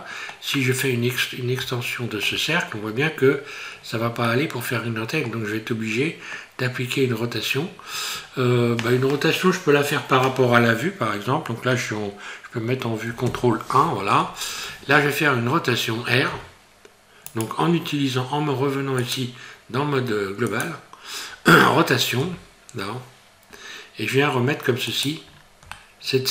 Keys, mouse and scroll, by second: 1.6 shift+middle click, 3.7 scroll down 4, 4.2 middle click, 5.5 scroll up 2, 13.3 ctrl+KP_1, 16.3 e, 19.0 click, 22.2 r, 25.4 scroll up 3, 25.7 shift+middle click.